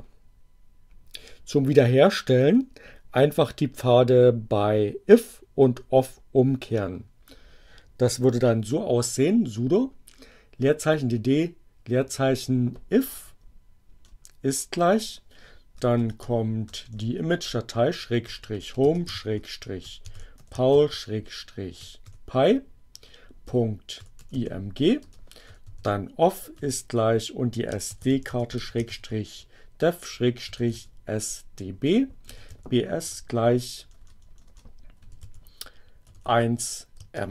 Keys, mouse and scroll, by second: 12.4 BackSpace, 15.5-26.4 typing, 27.5-33.6 typing, 34.6-37.0 typing.